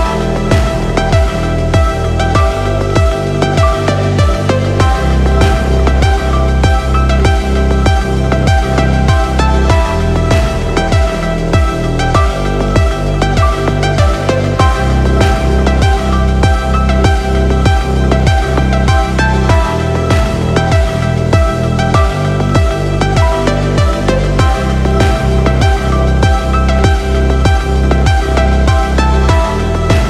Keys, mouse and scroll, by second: 2.0 click, 3.2 click, 3.4 scroll down 4, 3.6 click, 4.0 KP_Decimal, 4.3 KP_Enter, 5.6 shift+a, 6.4-8.2 drag, 8.8 click, 9.3 s, 9.5 click, 10.0 click, 10.8 click, 12.5-12.9 middle drag, 12.5-12.9 scroll up 1, 13.3 click, 14.2 click, 18.1 click, 24.5 click, 24.9-25.3 scroll down 2, 25.3-26.0 middle drag, 26.3 scroll down 1, 26.6-27.5 shift+middle drag, 28.0-29.1 middle drag.